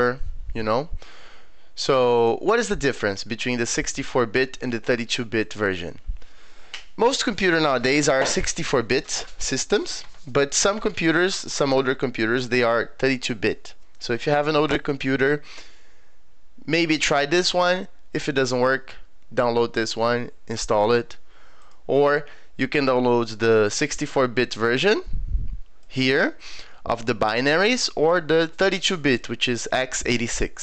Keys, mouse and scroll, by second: 2.2 click, 21.6 click, 23.7-25.8 drag, 27.7-29.2 drag.